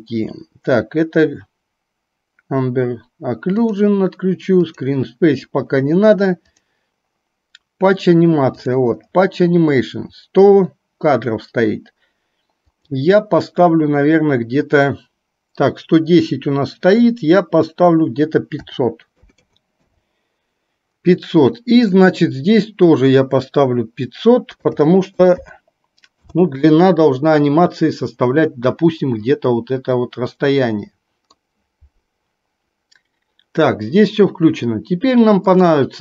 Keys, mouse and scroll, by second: 3.8 click, 4.7-5.7 drag, 12.7-20.0 drag, 19.5 KP_0, 22.1-26.3 drag, 25.5 KP_0, 30.1-31.5 middle drag.